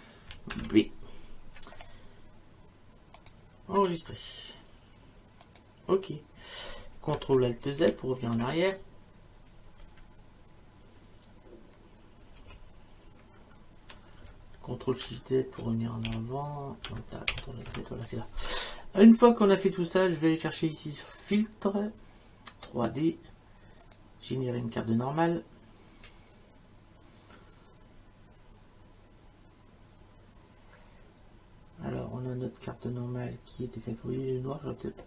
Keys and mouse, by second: 0.0-0.5 typing, 3.2 click, 5.4 click, 7.8 ctrl+alt+z, 9.8 ctrl+alt+z, 12.4 ctrl+alt+z, 15.0 ctrl+shift+z, 17.3 ctrl+alt+z, 21.2 click, 23.9 click, 31.9 click.